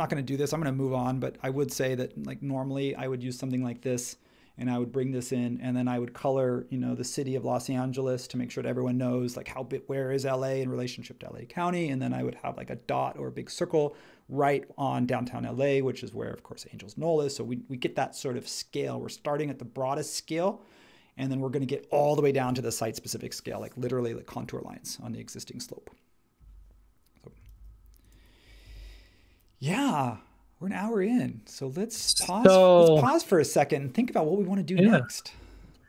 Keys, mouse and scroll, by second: 27.5 super+h, 28.6 super+s.